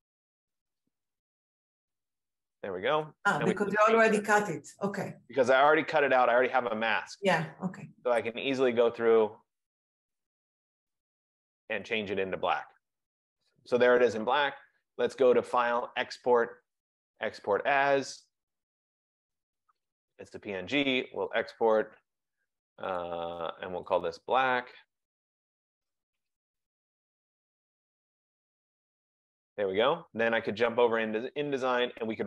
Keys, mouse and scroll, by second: 0.0-0.6 typing, 1.3 F15, 1.4 F15, 1.6 F15, 1.8 F15, 2.0 F15, 2.2 F15, 13.2 click, 15.6 click, 21.5 click, 24.1 click, 24.5 click, 25.3 click, 26.0-28.2 typing, 31.1 click.